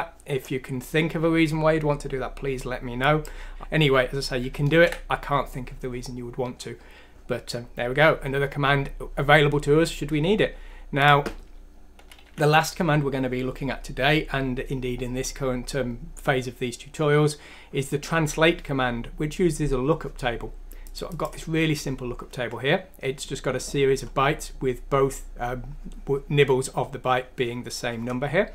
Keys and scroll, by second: 4.7 ctrl+z, 12.3 ;.